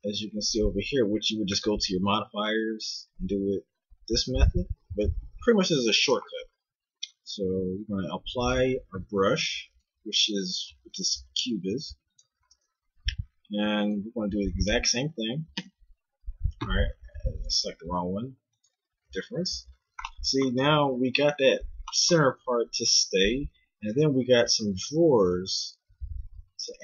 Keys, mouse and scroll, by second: 3.4-7.7 middle drag, 7.7 click, 9.7 right click, 10.6 g, 11.8 x, 13.4-15.5 right drag, 21.9-26.8 middle drag.